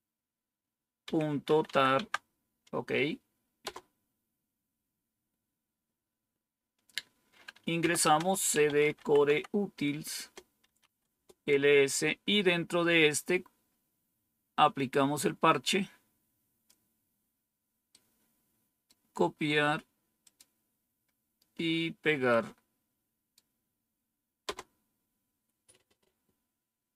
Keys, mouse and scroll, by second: 1.1-2.1 typing, 3.5 typing, 7.5-11.5 typing, 14.8-16.6 drag, 17.8 right click, 20.1 click, 22.2-23.3 right drag, 24.3 Return.